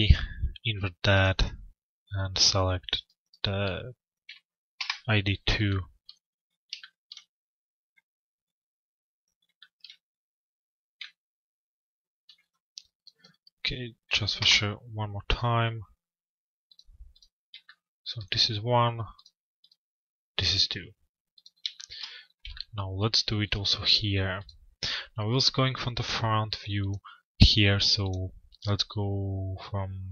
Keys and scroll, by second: 4.4 Return, 13.9 Return.